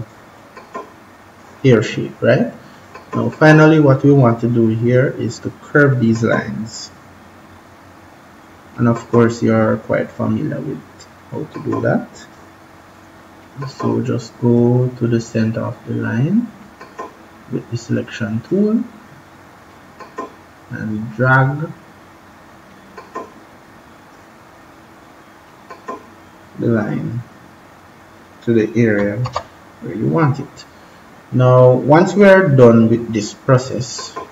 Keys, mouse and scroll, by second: 5.8 click, 29.2 ctrl+-, 33.7 click.